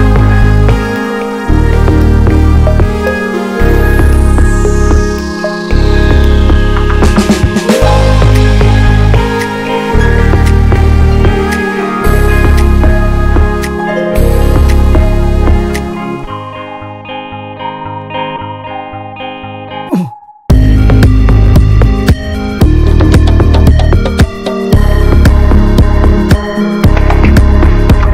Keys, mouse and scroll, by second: 0.0 ctrl+a, 0.4 Tab, 0.7 scroll up 1, 0.9 middle click, 1.3 ctrl+r, 2.2 ctrl+b, 3.8 scroll down 1, 4.1 middle click, 4.3 scroll up 1, 4.6-6.6 shift+middle drag, 6.6-8.1 drag, 8.1 middle click, 8.5 ctrl+b, 11.1 scroll down 3, 11.3 middle click, 11.5 scroll up 1, 11.5 Tab, 11.9 middle click, 12.4 ctrl+z, 12.9 ctrl+z, 13.1-14.8 middle drag, 14.8 alt+shift+click, 15.1 middle click, 15.7 ctrl+b, 17.0 scroll down 3, 17.2 middle click, 17.5 Tab, 17.6 drag, 17.8-18.3 shift+middle drag, 18.3 click, 18.5 ctrl+a, 18.9-19.3 middle drag, 19.3 scroll up 1, 19.6 Tab, 19.8 middle click, 20.4 scroll up 2, 20.6 shift+middle click, 21.5-21.9 scroll up 2, 21.7 shift+middle click, 22.6 ctrl+r, 23.2 scroll up 2, 23.9 ctrl+b, 25.6-26.7 middle drag, 26.7 ctrl+r, 27.4 ctrl+b.